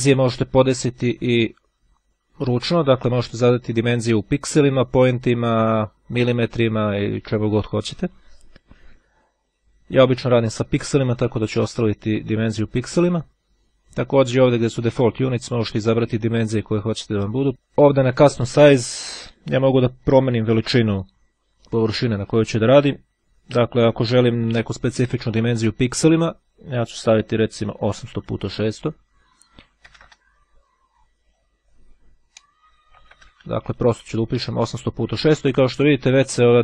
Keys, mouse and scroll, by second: 2.5-3.8 drag, 10.6 click, 15.0 click, 17.5 click, 26.6 KP_8, 31.4 click, 33.2 KP_Enter.